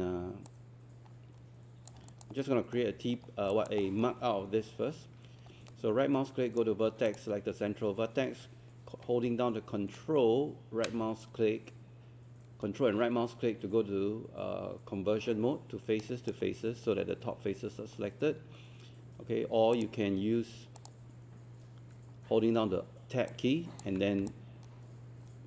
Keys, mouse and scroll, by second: 0.5 click, 2.1 alt+click, 2.4 alt+middle click, 3.1-3.5 scroll up 1, 3.5 alt+click, 3.8 alt+middle click, 5.7-7.1 right drag, 9.9-17.1 ctrl+right drag, 19.8 click, 22.4 Tab, 24.3 click, 24.7 Tab.